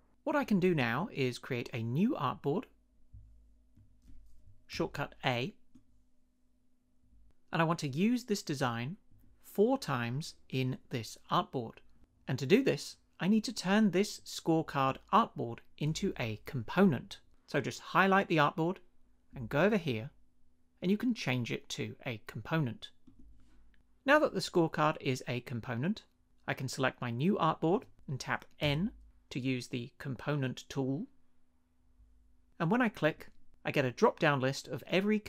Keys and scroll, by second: 4.7 a, 28.6 n.